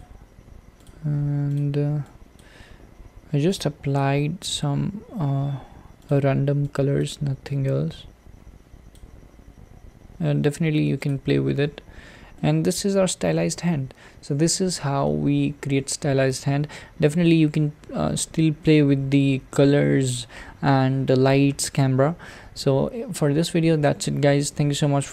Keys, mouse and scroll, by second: 0.0 click, 1.0-2.0 drag, 4.5 click, 6.6 click, 11.1 click, 11.5 scroll up 2, 12.4-13.7 shift+middle drag, 13.7-14.4 scroll down 4, 15.1-17.8 middle drag, 17.8-18.7 scroll up 4, 18.7-20.7 middle drag, 20.7-21.7 scroll down 4, 21.7-22.2 scroll up 2, 22.2-23.8 scroll down 2, 23.8-25.1 middle drag.